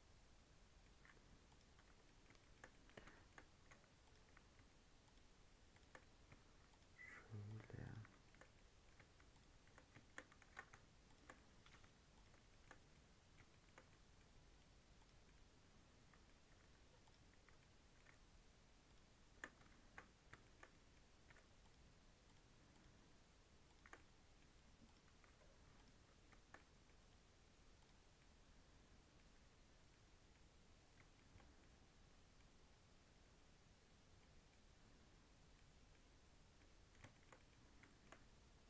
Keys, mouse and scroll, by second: 1.5 alt+click, 2.0-3.3 middle drag, 3.3-4.1 scroll up 2, 4.1 alt+shift+click, 5.7 shift+click, 5.9 middle click, 6.7 alt+shift+click, 7.5 alt+shift+click, 7.9 alt+shift+click, 8.2-9.3 shift+middle drag, 9.3 alt+shift+click, 10.4 ctrl+z, 11.1 alt+shift+click, 11.3 middle click, 12.2 alt+shift+click, 12.4 shift+middle click, 12.7 scroll down 1, 12.8-15.0 middle drag, 15.0 right click, 15.3-17.0 middle drag, 17.0 alt+click, 17.5-18.9 middle drag, 18.9 alt+shift+click, 19.8 ctrl+z, 20.0-20.4 scroll up 3, 20.4 shift+middle click, 20.5 scroll down 1, 20.6 middle click, 20.9 scroll up 1, 21.6 alt+shift+click, 22.3 alt+shift+click, 22.7 alt+shift+click, 23.7 alt+shift+click, 23.9 middle click, 24.4-25.8 right drag, 25.8 alt+click, 26.5 middle click, 26.9-28.1 right drag, 28.1-29.7 middle drag, 29.7 scroll down 2, 29.8 middle click, 30.3 scroll down 1, 31.1 shift+middle click, 31.4 scroll down 1, 31.5-33.9 middle drag, 33.9 scroll down 2, 34.1 middle click, 34.4-34.9 scroll up 2, 35.6-37.5 middle drag, 37.5 scroll up 3, 37.8 shift+middle click, 38.2-38.6 scroll up 2.